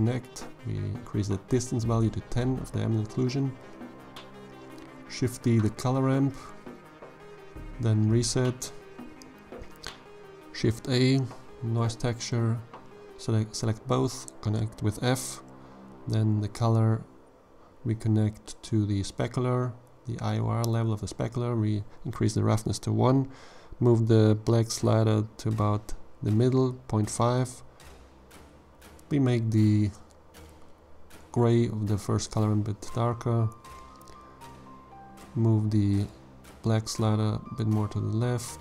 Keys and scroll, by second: 3.8 shift+d, 7.7 shift+a, 8.4 n, 8.8 o, 9.0 i, 10.9 f, 36.9 g, 37.3 z.